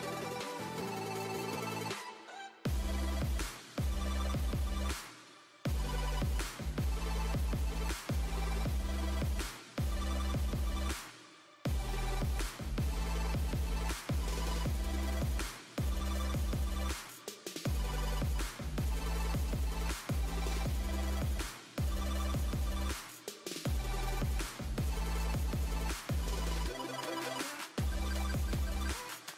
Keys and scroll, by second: 7.9 2, 15.2 shift+Down, 15.8 shift+Right, 27.1 5, 28.1 0.